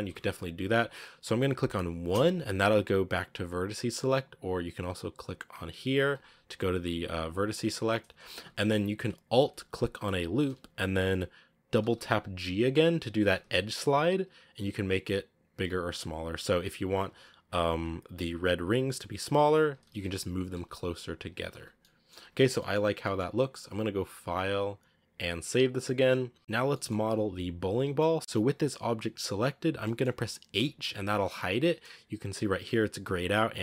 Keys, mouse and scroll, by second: 2.0 1, 6.0 click, 6.4 click, 6.8-7.3 drag, 8.1 scroll up 1, 8.2 a, 10.2-11.7 alt+right drag, 11.7 g, 13.1 g, 16.9 alt+right click, 17.6 g, 19.7 alt+right click, 20.4 g, 21.4 Tab, 21.4 scroll down 5, 21.7-22.1 middle drag, 22.1 a, 22.1-22.4 scroll down 6, 22.4 middle click, 22.7-24.6 scroll up 3, 22.9 shift+middle click, 24.6-26.4 scroll up 1, 26.4 scroll up 1, 26.6-30.4 middle drag, 30.4 h.